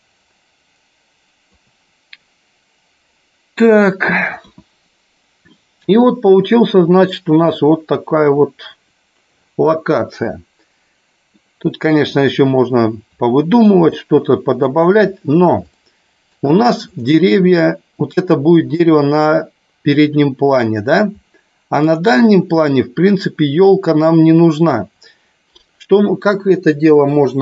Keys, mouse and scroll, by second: 4.5 KP_1, 11.5 middle click, 14.1-15.0 shift+middle drag, 15.9-16.6 shift+middle drag, 17.1 click, 22.0 click.